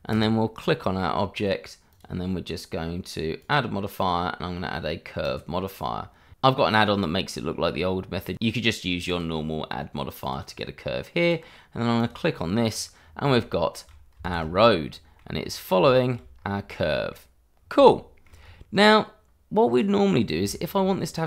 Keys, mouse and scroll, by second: 0.1 click, 9.1 click, 12.7-13.2 scroll down 1, 13.2 middle click, 13.4 shift+middle click, 14.2 shift+z, 14.6 scroll up 1, 14.7 middle click, 15.3-15.8 scroll up 1, 15.8 shift+middle click, 16.3-16.7 scroll up 1, 16.7 middle click, 17.8 shift+middle click, 18.4-19.7 scroll up 1, 19.7 click, 20.1-20.5 scroll down 1, 20.5 shift+middle click, 21.1-21.2 scroll down 1.